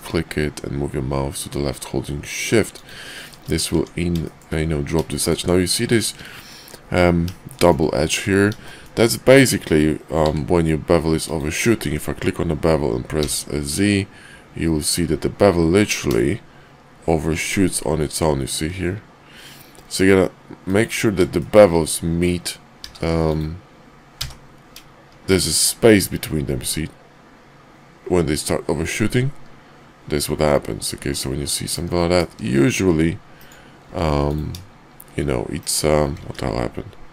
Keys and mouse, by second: 3.1 shift+click, 3.7 Tab, 4.2 shift+drag, 5.1 shift+middle click, 5.8 shift+middle drag, 7.5 shift+middle click, 8.6 shift+drag, 10.1 q, 21.4 shift+middle drag, 22.8 q, 33.8 q, 36.2 ctrl+`.